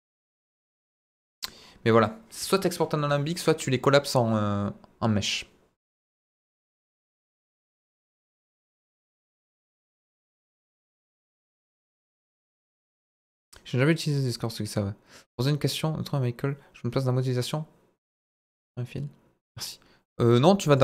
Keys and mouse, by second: 0.3 Tab, 0.4-1.5 middle drag, 1.9 middle click, 2.3-3.0 shift+middle drag, 3.2-3.8 shift+middle drag.